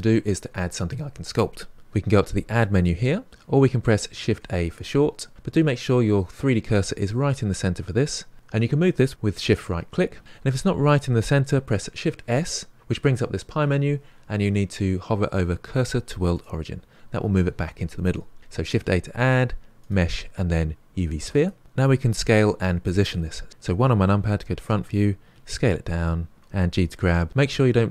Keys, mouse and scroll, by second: 2.7-4.2 drag, 4.2 shift+a, 5.8-8.3 middle drag, 9.2 shift+right click, 9.7 shift+right click, 12.0 shift+s, 18.6 shift+a, 23.5 KP_1, 25.3 s, 26.5 g.